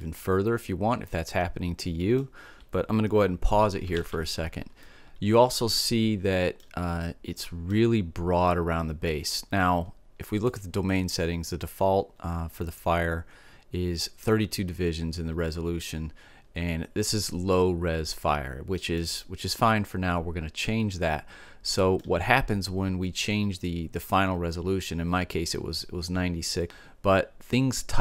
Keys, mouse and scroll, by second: 3.5 alt+a, 4.3 middle click, 5.2 middle click, 6.5-8.3 middle drag, 9.9-11.8 drag, 11.8-15.7 middle drag, 16.5-18.5 middle drag, 18.9 middle click, 20.4 middle click.